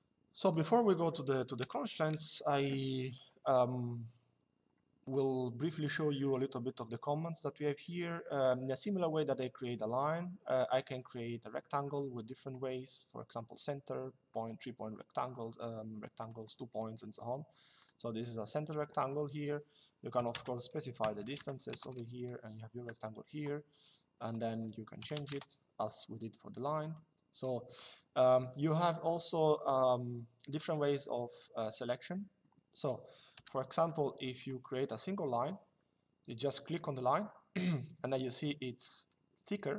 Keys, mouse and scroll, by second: 1.3 Delete, 2.8 click, 15.9 click, 17.5 click, 19.9 KP_1, 20.7 Tab, 20.9 KP_2, 21.4 KP_Enter, 23.9 click, 24.7 KP_3, 25.0 KP_Enter, 26.7 click, 34.5 Escape, 36.4 click.